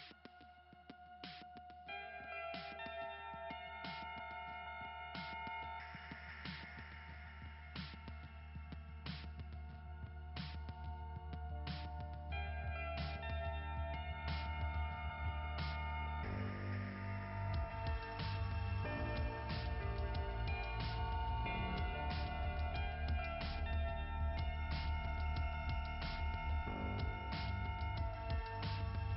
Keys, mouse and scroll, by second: 1.0 click, 1.3 click, 1.7 click, 2.0 click, 2.3 click, 7.0 click, 7.3 click, 8.9 click, 9.1 click, 26.7 click.